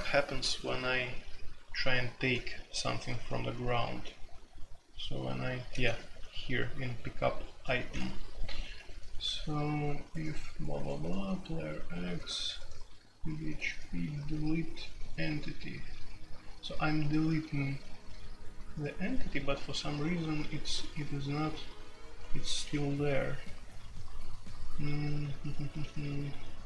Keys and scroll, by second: 1.8-2.7 j, 2.7 ctrl+d, 3.8 ctrl+d, 5.6 ctrl+d, 6.3-13.8 typing, 22.3-22.8 typing, 25.7-26.1 typing.